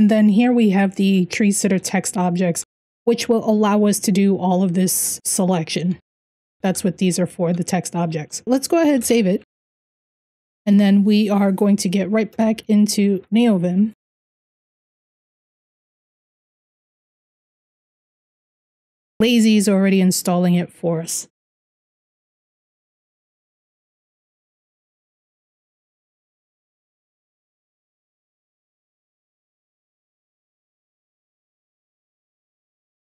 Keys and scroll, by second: 0.0-7.2 typing, 8.5-9.8 typing, 10.2 Return, 11.0 Up, 12.0 Return.